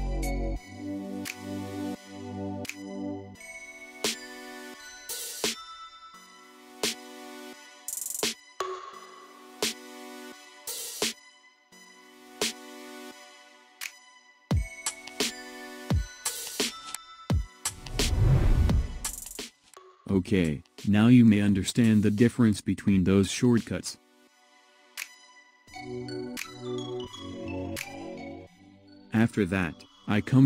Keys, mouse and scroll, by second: 0.0 shift+click, 0.4 shift+click, 0.8 shift+click, 1.5 alt+shift+s, 2.6-3.7 middle drag, 6.1 click, 7.5 ctrl+z, 8.4 click, 8.8 click, 9.7 alt+shift+s, 11.0-12.1 middle drag, 12.6 right click, 13.5 x, 14.3-15.5 middle drag, 17.2 middle click, 18.2-19.8 middle drag, 20.5 Tab, 21.7-22.8 middle drag, 23.0 scroll up 1, 23.2-23.7 middle drag, 23.7 scroll up 1, 23.8-24.7 middle drag, 24.8 middle drag, 25.1 click, 25.3 scroll down 2, 25.4-26.3 middle drag, 30.0 KP_1.